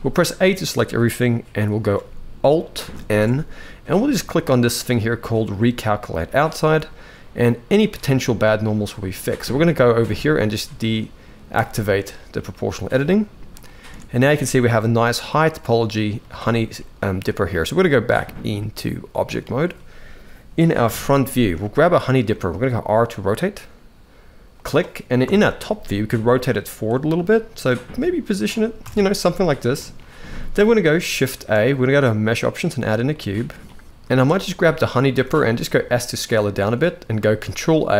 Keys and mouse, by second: 2.6 alt+n, 7.8 middle click, 11.3 click, 12.3 middle click, 13.7 alt+a, 14.0 shift+middle click, 14.5-15.8 middle drag, 16.1 shift+middle click, 17.0 middle click, 17.9-19.0 drag, 20.6 KP_1, 21.3 shift+middle drag, 22.0 r, 25.0 KP_7, 25.8 r, 26.9 g, 28.5 KP_1, 29.6 shift+middle click, 31.1 shift+a, 34.0 click, 34.8 s, 37.2 ctrl+a.